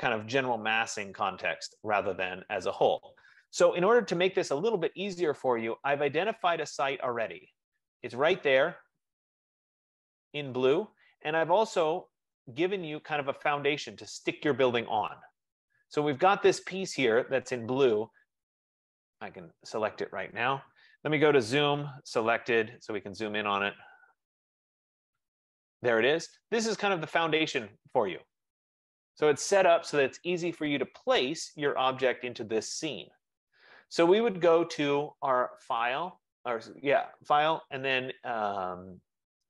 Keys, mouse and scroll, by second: 10.5 right click, 13.7 scroll, 15.1 F15, 15.2 middle click, 16.2 click, 19.6 click, 21.6 z, 21.8 Return, 22.7 Return, 22.7 s, 23.9 click, 27.4 middle click, 27.4-27.7 scroll, 27.7 middle click, 28.3-28.7 scroll, 29.0-29.4 scroll, 30.2-30.6 scroll, 31.7 scroll, 35.8 scroll down 5, 36.0-39.4 drag.